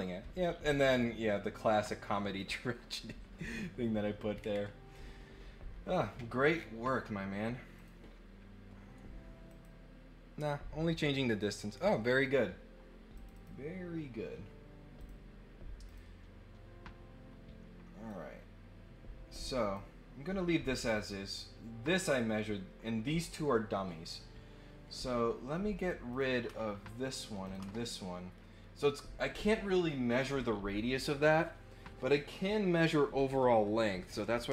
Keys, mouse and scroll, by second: 0.9 click, 2.4 click, 4.3-4.7 scroll up 4, 6.4 scroll down 2, 7.7 click, 9.4 click, 13.1 click, 13.3 click, 15.0 click, 15.8 click, 18.1-19.7 drag, 26.1 click.